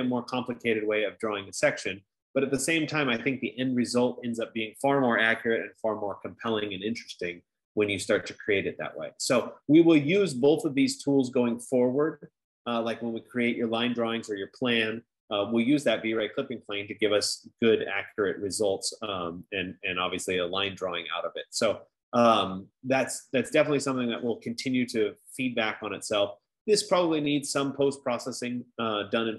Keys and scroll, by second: 24.1 F15.